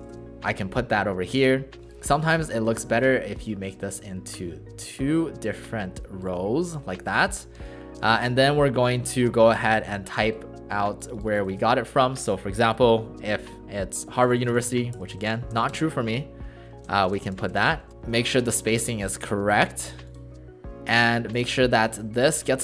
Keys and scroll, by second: 2.6 Return, 7.6 space, 11.5 ctrl+shift+a, 14.3 shift+h, 16.7-17.9 typing, 21.0 space.